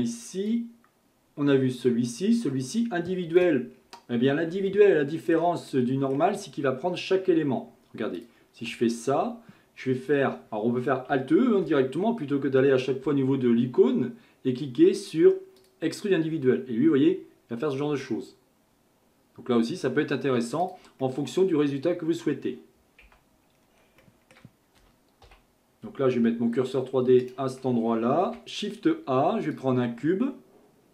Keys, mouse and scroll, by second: 0.5-3.4 drag, 3.7-4.7 scroll up 2, 4.7-8.2 shift+middle drag, 8.2 alt+click, 11.6 alt+e, 21.0-23.1 middle drag, 23.1 Tab, 23.6-24.0 scroll down 1, 24.0-25.3 shift+middle drag, 25.3 KP_1, 27.2 shift+right click, 28.2 shift+a.